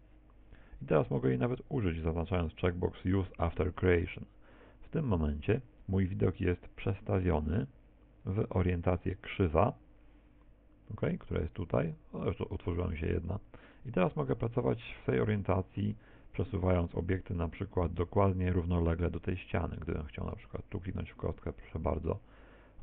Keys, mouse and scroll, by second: 3.9 click, 7.2 click, 11.6 click, 14.3 Tab, 14.9 middle click, 19.9 right click, 21.3 click.